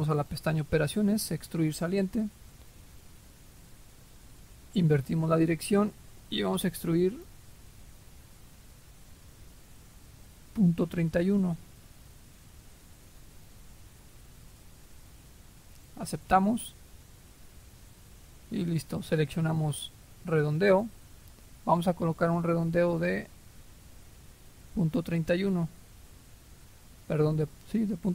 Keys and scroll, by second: 12.6-13.2 typing.